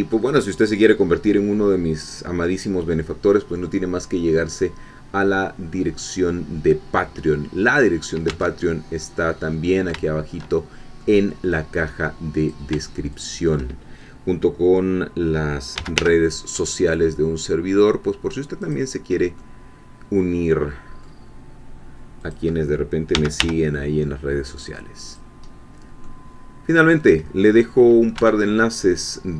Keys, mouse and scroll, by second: 0.4-1.0 scroll down 1, 1.0-2.3 scroll up 1, 2.3 scroll down 2, 2.8-4.0 scroll up 2, 4.0 scroll down 1, 4.3-5.5 middle drag, 8.3 Tab, 8.4 scroll down 1, 9.4 scroll down 1, 9.6 scroll up 1, 9.8 scroll down 1, 10.6 shift+scroll up 1, 11.0 middle click, 12.5 click, 13.1 shift+click, 15.5-16.5 typing, 18.6 click, 19.4-21.2 middle drag, 22.3 click, 23.1 g, 23.4 y, 25.0 click, 25.5-25.8 scroll down 1, 26.0-27.2 middle drag, 27.2 scroll down 1, 27.7 middle click, 28.2 Tab, 28.6 middle click.